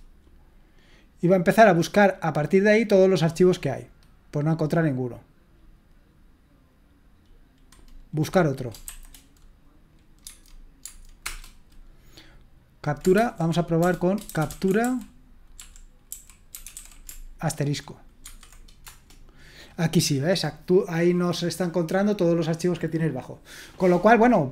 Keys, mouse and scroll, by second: 8.9 shift+b, 10.2 Tab, 10.8 Tab, 11.2 Return, 13.2-17.2 typing, 18.3-18.9 typing.